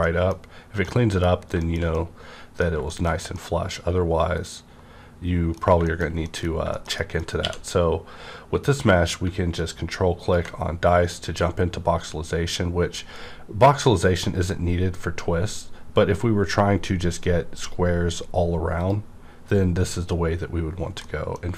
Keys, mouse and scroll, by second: 0.0 middle click, 0.4-0.8 scroll down 1, 0.8 middle click, 1.6 shift+scroll down 1, 1.9 middle click, 3.1-3.6 scroll down 2, 3.3 middle click, 3.3-5.8 middle drag, 5.6-6.1 scroll down 2, 6.2 middle click, 6.5 scroll down 1, 6.7 shift+middle click, 7.4 q, 9.8 middle click, 9.8 q, 10.2 ctrl+click, 10.8 scroll up 1, 11.3-12.4 scroll down 1, 12.4-13.1 scroll, 13.1-13.9 scroll down 1, 13.9-15.3 scroll up 1, 15.3-16.2 scroll down 1, 16.2 scroll up 2, 17.8 scroll up 1, 18.8 click, 21.0 middle click, 21.0 middle click, 21.0 click, 21.4 scroll up 2.